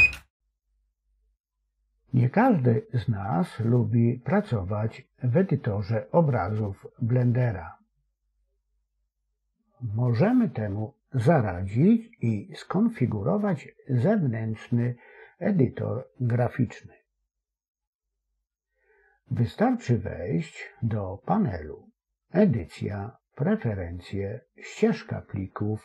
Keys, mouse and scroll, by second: 19.8-22.0 drag.